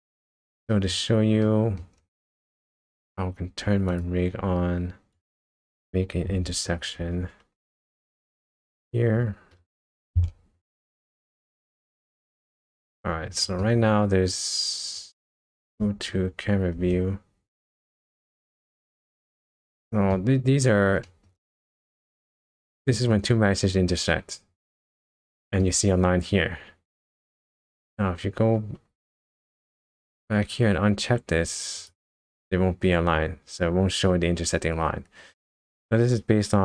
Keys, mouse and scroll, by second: 0.0-0.4 scroll down 2, 0.5 middle click, 1.4 middle click, 2.1 scroll up 1, 3.9 click, 5.1 click, 7.5 ctrl+Tab, 8.4 click, 10.0 r, 12.2 middle click, 13.0 scroll up 2, 13.4 shift+middle click, 13.8 scroll up 1, 16.8 KP_0, 18.7 shift+middle click, 19.6 middle click, 20.4 scroll up 1, 21.0 shift+middle click, 21.3-21.7 shift+scroll up 3, 22.1 middle click, 22.6 middle click, 23.4 scroll up 1, 25.3 shift+middle click, 26.3 scroll up 1, 27.0 scroll down 1, 28.9 ctrl+Tab, 30.0 click, 31.8 click, 33.6 scroll up 1.